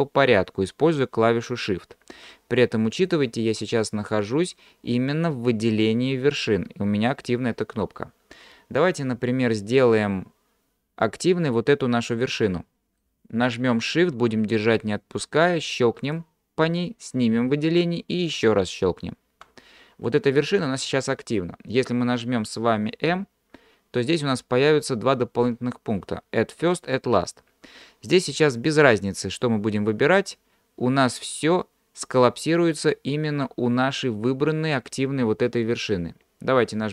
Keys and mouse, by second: 12.1 middle click, 16.1 shift+click, 23.1 m.